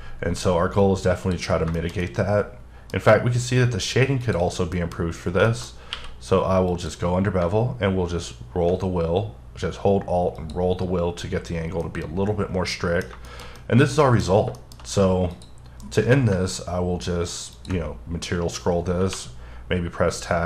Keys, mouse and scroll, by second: 0.8 click, 1.8 shift+middle click, 2.9 scroll down 1, 4.2 click, 4.7 middle click, 5.0-5.4 scroll up 2, 5.5 shift+middle click, 5.7 shift+scroll up 3, 5.9 q, 6.7 click, 7.6-8.8 alt+scroll down 2, 10.4 click, 10.7-11.4 scroll down 2, 11.4-11.8 scroll down 3, 11.8 middle click, 13.3 double middle click, 13.6 middle click, 14.2-15.3 scroll down 4, 14.6 shift+middle click, 15.3 click, 15.8 alt+m, 17.5 ctrl+click, 17.9-19.0 scroll up 5, 20.2-20.4 scroll up 9.